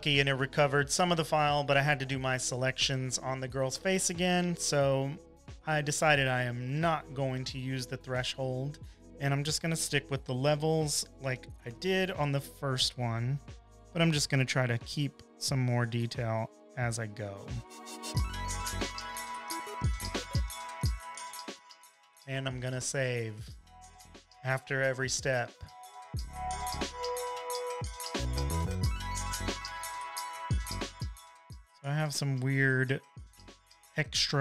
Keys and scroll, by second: 9.0 shift+super+], 10.5 super+l, 13.6 shift+super+u, 14.1 super+l, 24.5 super+s, 27.0 v, 27.7 shift+super+u, 27.9 super+l.